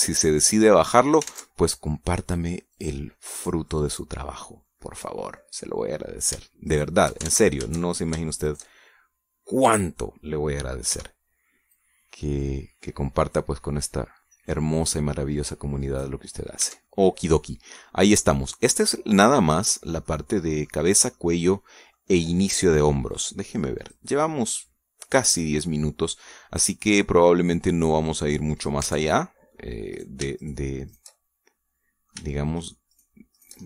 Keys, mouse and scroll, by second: 1.1-2.2 middle drag, 2.2 ctrl+Tab, 3.6 click, 4.2 right click, 4.6-6.4 middle drag, 6.8 middle click, 7.6 shift+right click, 8.2 ctrl+shift+z, 8.8 ctrl+shift+middle click, 9.4 shift+right click, 9.7-10.8 shift+middle drag, 11.8 o, 12.6-13.6 drag, 13.6-14.4 scroll down 4, 17.2 scroll down 2, 17.6 Tab, 17.8-20.8 drag, 21.0 click, 22.1 click, 24.0 click, 24.7 click, 26.0 scroll down 2, 26.5-27.0 scroll up 2, 27.2-29.8 middle drag, 29.8 Tab, 30.0 middle click, 30.9 right click, 31.3 shift+right click, 31.8 shift+right click, 32.1-33.2 shift+middle drag, 33.5 shift+right click.